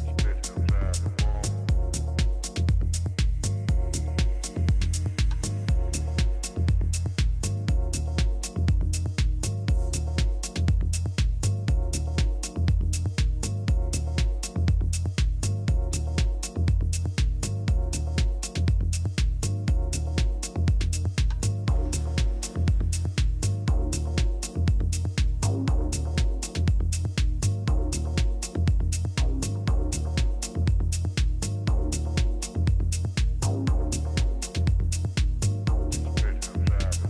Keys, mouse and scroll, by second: 1.4 KP_7, 2.1 a, 5.0 z, 5.4 a, 5.7 a, 8.4 b, 9.0 middle click, 15.2-17.2 middle drag, 16.8 b, 21.2-23.2 middle drag, 23.2 Delete, 25.8 z, 29.0 Tab, 34.0 a, 36.9-37.0 drag.